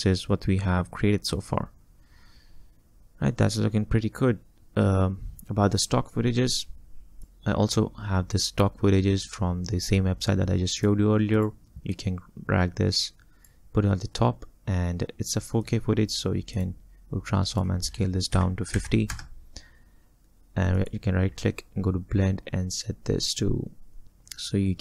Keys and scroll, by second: 18.4 5, 18.8 0, 19.2 Return.